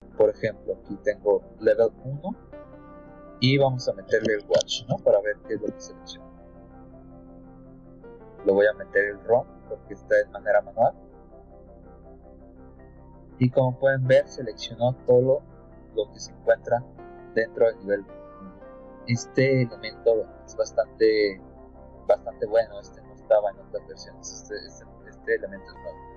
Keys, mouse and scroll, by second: 1.4 click, 3.7-5.3 typing, 5.5 Return, 7.3-8.3 drag, 11.9 click, 13.3-14.8 scroll down 10, 15.0-15.3 scroll up 2, 15.3 middle click, 15.8 scroll down 2, 16.6-17.7 scroll up 6, 17.9-18.4 scroll down 2, 19.5-20.5 drag, 20.9 middle click, 21.0 scroll down 2, 21.1 middle click, 22.9-25.1 drag, 25.5 middle click.